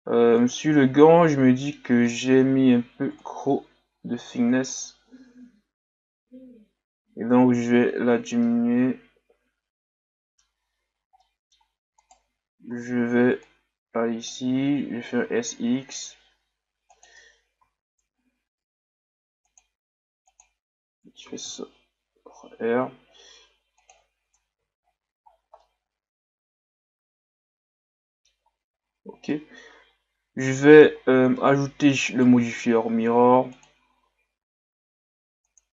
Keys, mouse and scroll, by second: 0.1 Tab, 0.4 right click, 1.0-1.3 scroll up 1, 1.3-3.2 middle drag, 3.2-6.3 shift+drag, 8.5-10.9 middle drag, 10.9 scroll down 2, 11.2-12.0 middle drag, 12.0 right click, 12.2 Tab, 13.4-15.2 drag, 15.2 s, 17.6 ctrl+r, 24.8-25.3 scroll down 1, 25.6-28.6 middle drag, 28.7-29.3 scroll up 2, 29.3-30.9 middle drag, 30.9-31.3 scroll up 2, 31.4-32.1 middle drag, 32.1 right click, 35.6 click.